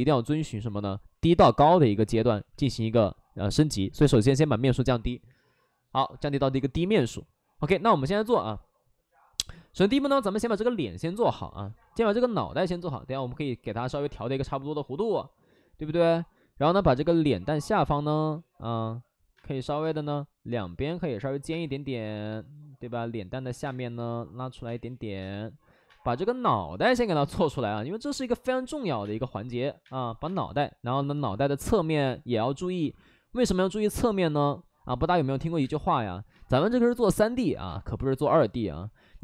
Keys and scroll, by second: 6.1 shift+f, 7.6 shift+f, 16.5-18.6 typing, 17.8 ctrl+z, 21.9 ctrl+z, 23.3 ctrl+z, 23.6 space, 24.6 space, 25.1 space, 25.8 space, 29.8 space, 31.9 space, 36.3 space, 37.6 space, 38.2 space.